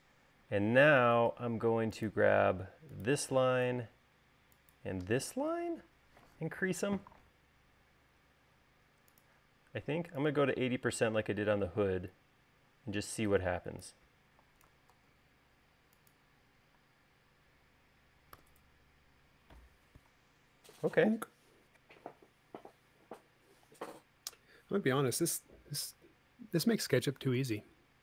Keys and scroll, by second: 1.2 space, 15.6 super+s, 17.4 space, 19.0 u.